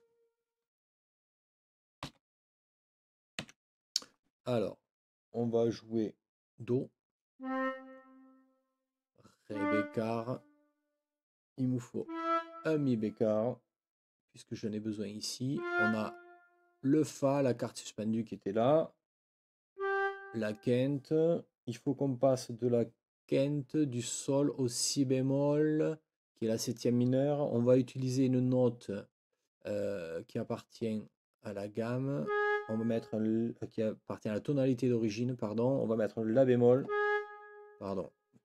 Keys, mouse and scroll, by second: 2.0 n, 3.4 5.